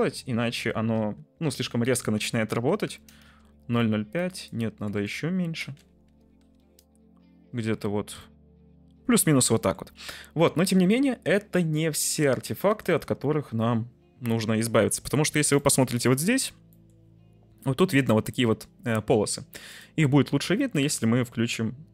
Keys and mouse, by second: 4.3-6.9 drag, 5.1 Left, 8.3-9.7 middle drag, 15.5-16.1 middle drag, 16.8 middle drag, 18.4 middle click, 19.8-21.9 drag.